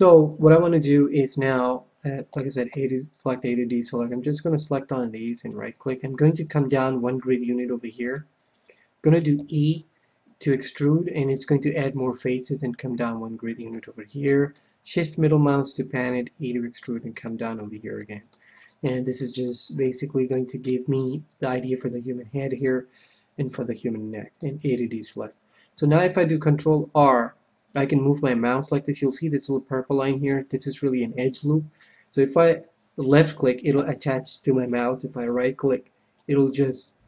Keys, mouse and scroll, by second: 2.2 a, 2.6 a, 3.8 c, 5.3-7.3 right drag, 6.4 middle click, 8.0 middle click, 9.3 e, 12.5-14.3 drag, 13.6-15.3 middle drag, 16.0 e, 17.2-19.0 drag, 18.0-22.0 middle drag, 24.3 a, 26.5 ctrl+r, 35.3-37.0 right drag.